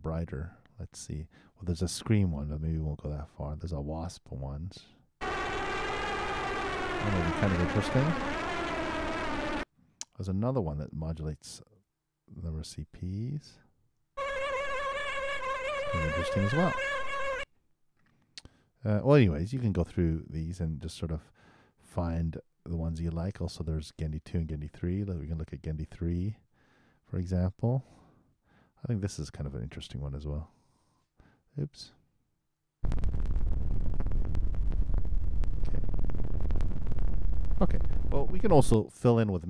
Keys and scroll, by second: 5.1 super+Return, 9.6 super+., 11.7 super+Return, 14.1 super+Return, 17.4 super+., 30.1 super+Return, 32.7 super+Return, 38.7 super+..